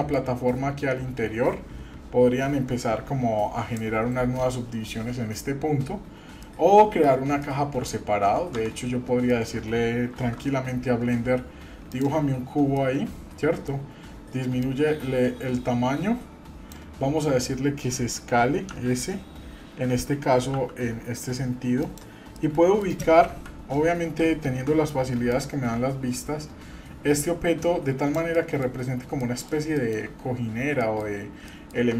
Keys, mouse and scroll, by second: 6.4 middle click, 7.4 middle click, 8.6 Tab, 9.0-9.5 scroll down 2, 9.3 middle click, 10.1 shift+a, 12.8-13.7 middle drag, 14.6-16.8 drag, 18.7 s, 22.4 middle click, 23.2 KP_3, 24.5 KP_1, 25.3-28.2 drag, 28.3 middle click, 28.7-29.2 scroll up 2, 29.2 middle click, 29.8 shift+middle click, 30.8 middle click, 31.1-31.4 scroll up 2, 31.5 shift+middle click.